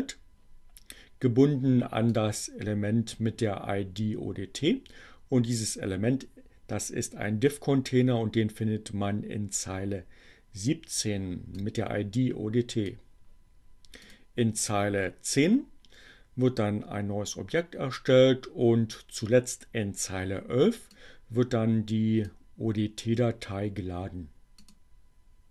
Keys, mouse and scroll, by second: 1.6-3.4 drag, 10.5-12.9 drag, 13.9 click, 20.7-22.6 drag, 23.0-24.9 drag.